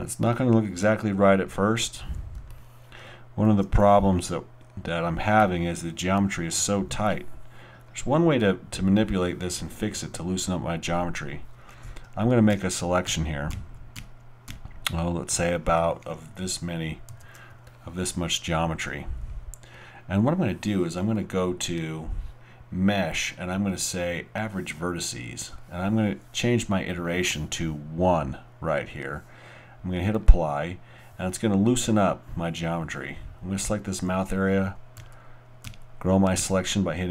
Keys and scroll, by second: 12.5-14.5 typing, 35.0 shift+., 35.6 shift+., 36.4 shift+..